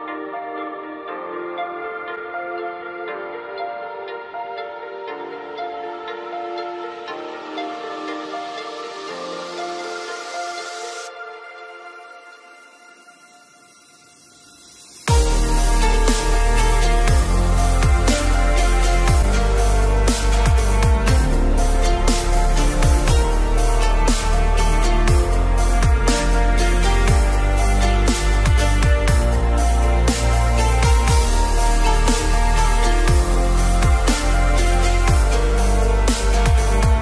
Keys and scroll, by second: 2.3 ctrl+g, 2.8 ctrl+Caps_Lock, 4.2 ctrl+alt+shift+e.